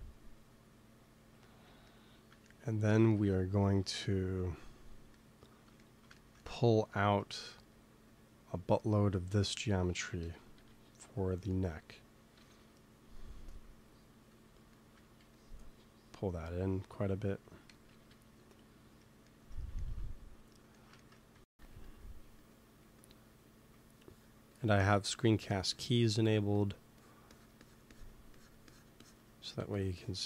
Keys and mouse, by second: 0.4-2.4 drag, 6.8 f, 8.0-9.9 drag, 10.1 KP_1, 10.5 KP_3, 12.3 KP_1, 15.1 f, 15.8 click, 17.6 KP_1, 17.9 KP_3, 21.2 x, 21.5 f, 22.1 f, 22.7 f, 24.0-29.5 drag, 26.3 f, 29.5 f.